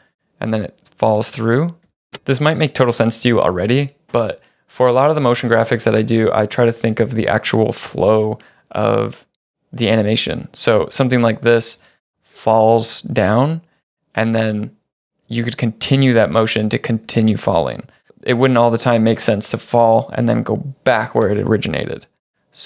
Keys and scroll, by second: 1.9 space.